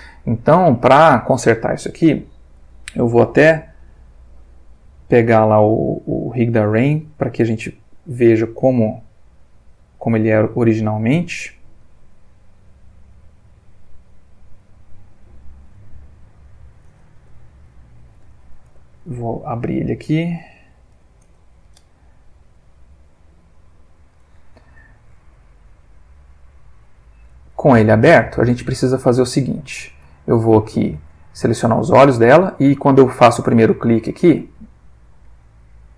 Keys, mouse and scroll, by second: 0.7 ctrl+s, 2.5 click, 3.3 click, 6.7 click, 7.9 click, 8.5 click, 9.5 click, 10.3 click, 11.3 click, 12.1 click, 14.1 click, 15.3 click, 16.6 click, 17.1 F2, 17.6 Right, 18.4 End, 18.6 BackSpace, 20.5 Left, 20.9 0, 21.2 Return, 22.5 click, 27.6-29.9 middle drag, 30.1 ctrl+shift+middle click, 30.7 ctrl+shift+middle click, 33.0 click, 35.1 click, 35.8 click.